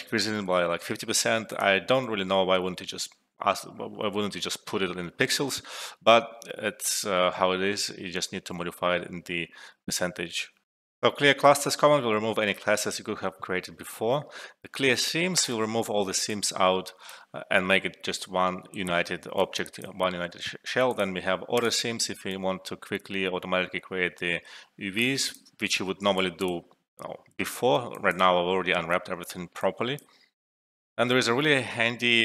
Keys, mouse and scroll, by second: 0.0-0.9 typing, 1.5 click, 2.0-3.2 typing, 10.6 alt+F12, 15.3 click, 16.2-17.2 alt+drag, 18.7 ctrl+z, 19.3-20.0 alt+click, 20.5 alt+middle click, 20.9 alt+click, 22.2-25.4 alt+drag, 23.5-24.2 alt+drag, 25.7 ctrl+z, 26.1 alt+click, 27.6 alt+middle click, 27.9 alt+click, 29.3 alt+middle click, 29.9-30.2 alt+click.